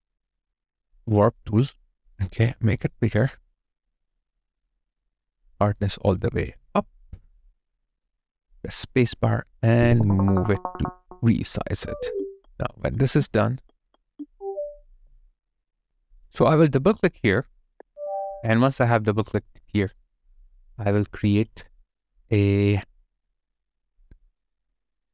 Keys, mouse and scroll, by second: 6.9 alt+right click, 7.5 alt+click, 9.1 space, 11.8 space, 12.8 double click, 14.9 alt+click, 15.7 alt+middle click, 17.7 double click.